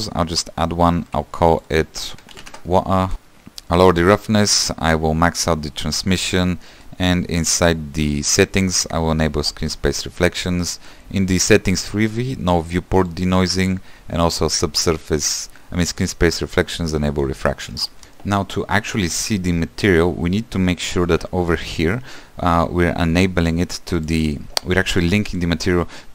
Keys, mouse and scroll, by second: 3.1-3.8 scroll down 6, 3.8-9.7 drag, 11.7 scroll up 10, 12.1 click, 15.9 click, 16.6 click, 17.4 scroll down 2, 18.0-26.1 drag.